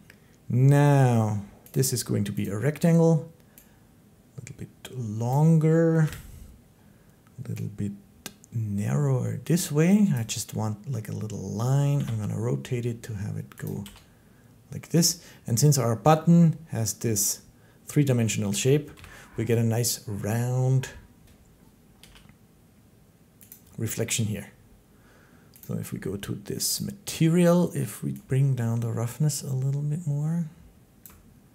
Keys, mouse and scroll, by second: 1.5 click, 2.2 click, 5.1 click, 5.8 7, 9.9 click, 11.8 r, 13.5 click, 13.7 g, 14.9 click, 16.8 middle click, 18.3 middle click, 18.8 7, 21.8 g, 23.3 click, 25.4 click, 26.6 click, 30.8 shift+click.